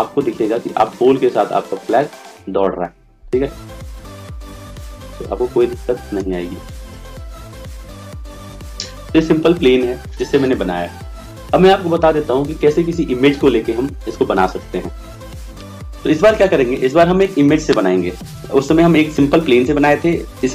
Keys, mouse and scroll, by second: 7.4 right click.